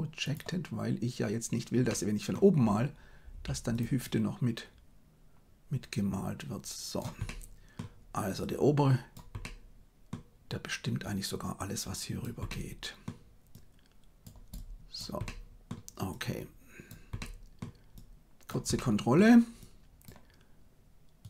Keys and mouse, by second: 1.8 middle click, 3.2 f, 4.0-6.9 drag, 7.2 middle click, 8.3 click, 9.3 middle click, 11.0-12.2 drag, 12.4 middle click, 13.6 click, 14.6 click, 15.2 middle click, 16.0 click, 17.1 middle click, 17.9 click, 18.7 middle click, 19.7 click.